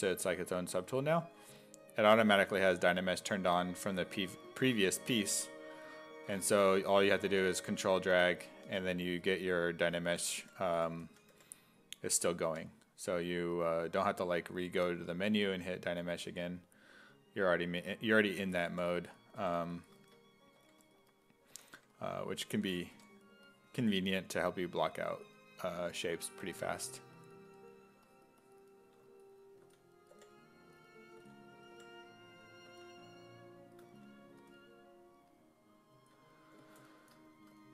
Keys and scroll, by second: 1.4 1, 2.3 1, 4.8 1, 8.7 1, 9.1 s, 10.2-12.5 typing, 18.4 s, 18.7 5, 19.4 2, 20.6-23.0 typing, 29.6 s, 30.1 5, 31.2 s, 31.7 5, 32.7 s, 34.4 s.